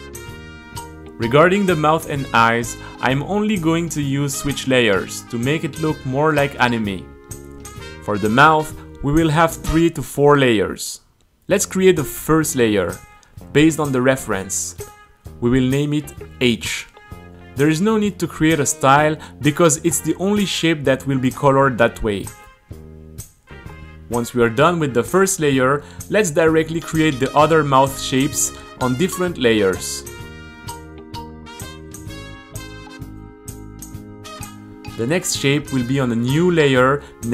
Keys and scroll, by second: 0.0 Return, 11.7-14.5 typing, 15.5 space, 15.8 a, 16.4 space, 16.6 t, 17.9-23.0 typing, 24.1 space, 25.5 Return, 25.7 u, 27.4 Return, 27.9 space, 28.9 u, 30.6-35.8 typing, 30.7 Return.